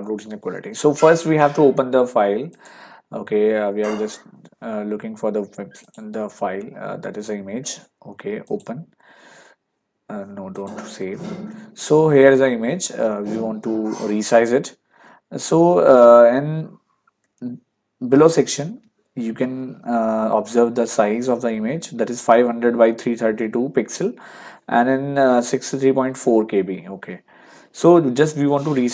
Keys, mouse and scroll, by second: 2.6 click, 5.9 click, 8.5 click, 10.6 click, 18.7 ctrl+1, 27.6 ctrl+1.